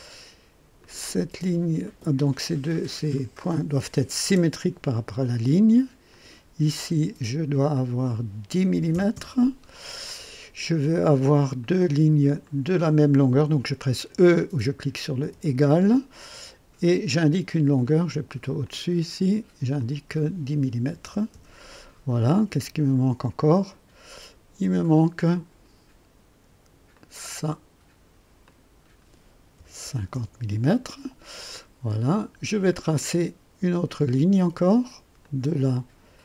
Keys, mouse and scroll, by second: 0.8 click, 1.8 click, 3.1 click, 4.2 s, 6.1 click, 7.7 click, 8.7 KP_1, 8.9 KP_0, 9.1 KP_Enter, 11.6 click, 12.4 click, 15.2 e, 16.8 click, 17.8 click, 18.6 click, 19.7 click, 20.8 KP_1, 21.0 KP_0, 21.3 KP_Enter, 25.1 click, 26.9 click, 28.4 click, 29.6 KP_5, 29.8 KP_0, 30.1 Return, 33.0 click, 35.2 click.